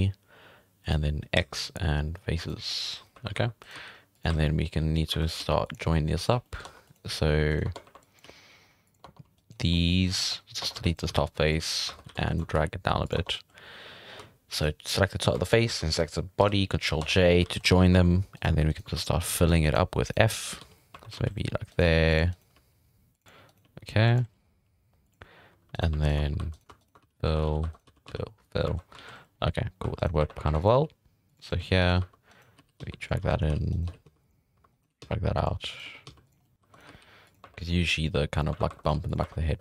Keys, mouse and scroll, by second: 1.3 x, 2.7 middle drag, 3.1-5.4 typing, 3.6 right click, 4.3 scroll down 2, 4.4 middle click, 4.7-5.1 scroll up 2, 5.2 right click, 5.9 middle drag, 6.4 shift+middle click, 6.6 Tab, 6.8 scroll up 1, 6.8 right click, 7.5 right click, 7.6 Tab, 7.8 1, 8.0 click, 8.2 g, 9.0 Tab, 9.3 right click, 9.6 scroll down 3, 9.7-10.2 middle drag, 10.2 Tab, 10.3 scroll up 3, 10.6 Tab, 10.7 3, 10.8 right click, 11.1 x, 11.9 1, 12.1 alt+a, 12.3 alt+shift+right click, 12.5 g, 13.1 Tab, 13.3 scroll down 1, 13.3-14.5 middle drag, 14.5 right click, 15.4 shift+right click, 16.4 ctrl+j, 17.0 Tab, 17.3 scroll down 1, 17.4 alt+a, 17.6 scroll up 2, 17.6 middle drag, 17.9 2, 18.3 right click, 18.7 shift+right click, 18.9 f, 19.1 middle drag, 19.3 1, 19.5 alt+a, 19.6 right click, 20.0 shift+right click, 20.3 shift+right click, 20.6 f, 20.7 middle drag, 20.9 1, 21.1 alt+a, 21.7 right click, 21.8 g, 22.3 right click, 22.5 g, 23.5 right click, 23.6 g, 24.6 g, 25.7-28.6 typing, 25.7 right drag, 26.0 right click, 26.5 right click, 26.8 shift+right click, 27.4 alt+a, 27.7 right click, 28.3 scroll down 1, 28.4 middle drag, 28.7 scroll up 3, 28.9 alt+a, 29.8 2, 30.0 right click, 30.2 1, 30.4 1, 30.5 right click, 30.7 g, 31.8 alt+a, 32.0-34.8 typing, 32.3 right click, 33.2 alt+a, 33.7 right click, 34.7 right click, 35.7 right click, 35.8-39.2 typing, 36.4 scroll down 1, 36.4 middle click, 36.7 right click, 38.8 right click.